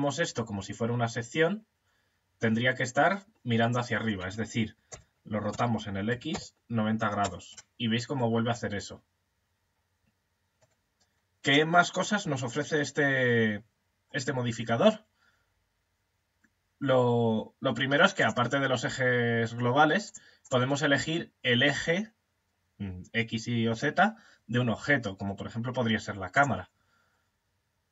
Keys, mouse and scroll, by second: 4.3 r, 7.5-17.6 middle drag, 17.6 click, 19.9 click.